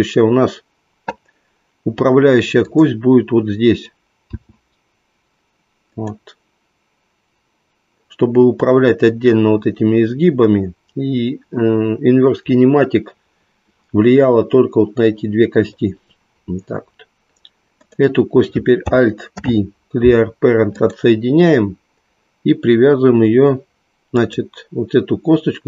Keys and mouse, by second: 2.7 click, 4.3 e, 17.8 click, 19.3 alt+p, 24.1 click.